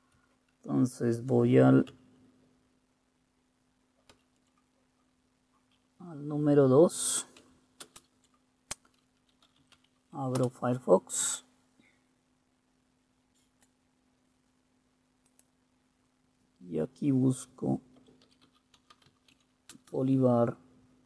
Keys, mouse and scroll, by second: 4.2 super+2, 7.9 super+space, 9.2-10.4 typing, 10.5 Return, 17.8-19.9 typing.